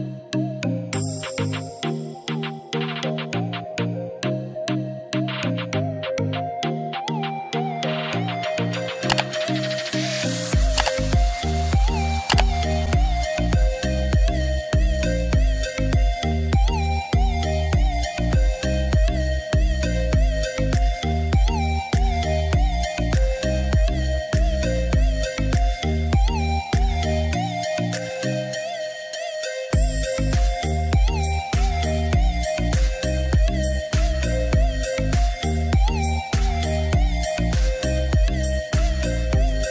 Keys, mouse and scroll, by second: 5.3-10.0 drag, 10.0-13.1 shift+drag, 19.9 right click, 22.3 click, 24.5 ctrl+z, 25.6 click, 29.2 ctrl+z, 30.9 shift+click, 31.5 right click, 34.1 click.